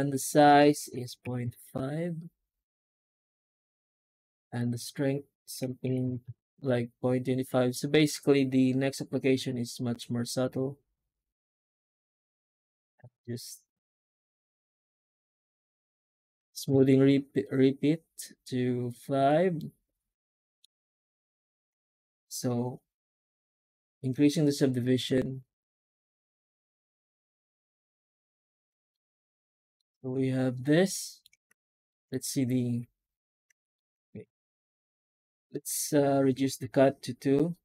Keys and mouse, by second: 19.4-20.5 middle drag, 21.8 F9, 28.8 middle click, 30.5-31.1 middle drag, 31.7 shift+middle drag, 31.7 shift+z, 33.6 shift+middle drag, 33.6 shift+z, 34.0 middle drag, 34.4 shift+middle drag, 35.1 F9.